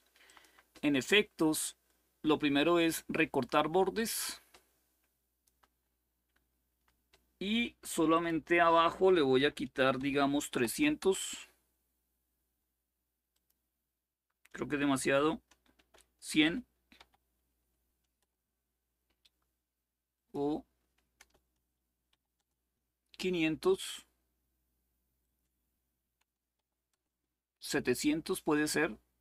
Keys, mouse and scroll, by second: 0.0 click, 3.9-5.2 drag, 7.9 click, 9.1 Delete, 9.5-11.2 typing, 13.1 click, 15.5-16.7 typing, 17.9 Return, 19.9 click, 20.9 BackSpace, 21.8 5, 22.1 Return, 25.0 click, 25.8 Delete, 26.3 7, 26.6 Return.